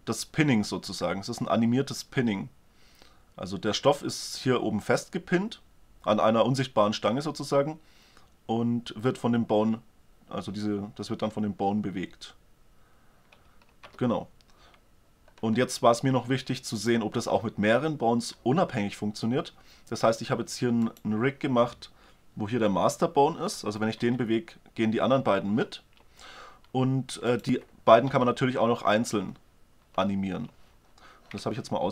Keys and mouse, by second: 13.8 alt+a, 19.4-20.9 middle drag, 20.9-22.5 right drag, 24.1 g, 27.4-28.6 right drag, 28.2 g, 28.6-29.3 middle drag.